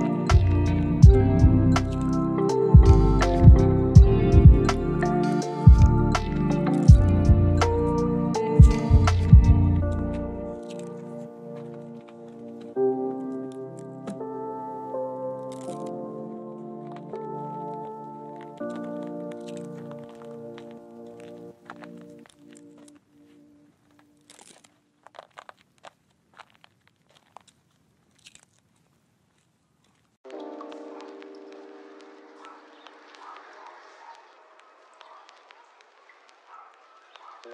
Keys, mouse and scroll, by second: 2.7 right click, 3.1-3.4 scroll down 1, 3.4-4.2 scroll up 1, 4.2-4.6 scroll down 1, 4.6-5.2 scroll up 1, 5.2 middle click, 5.5-6.2 scroll up 1, 6.2 scroll down 1, 6.3-7.6 scroll up 1, 8.2 scroll down 1, 8.3-9.1 scroll up 1, 9.1-9.5 scroll down 1, 9.5-10.0 scroll up 1, 10.0 right click, 10.4 middle click, 11.1 middle click, 11.1 right click, 11.3 right click, 11.9 click, 15.6 click, 16.8 scroll up 1, 17.7 click, 25.9 right click, 27.5 click, 28.1 click, 29.9 scroll down 1, 30.2 right click, 30.5 scroll down 1, 30.7 scroll up 1, 30.8 right click, 32.5 scroll down 1, 32.7-33.0 scroll up 1, 34.2 click.